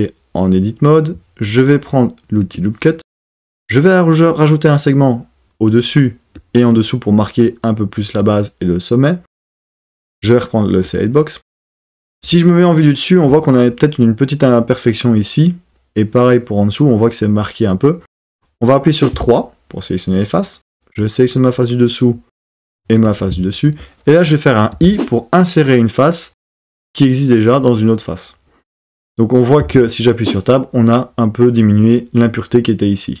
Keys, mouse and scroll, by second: 2.5 click, 3.7-5.8 drag, 6.4 click, 10.8 click, 19.1 3, 23.0 shift+click, 24.7 i, 29.6 Tab.